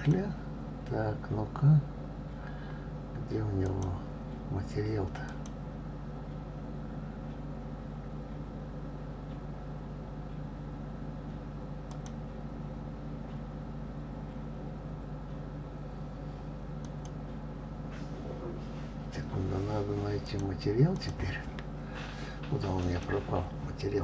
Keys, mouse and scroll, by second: 1.0 click, 4.7 click, 6.4 click, 13.0 click, 17.9 click, 21.4 click.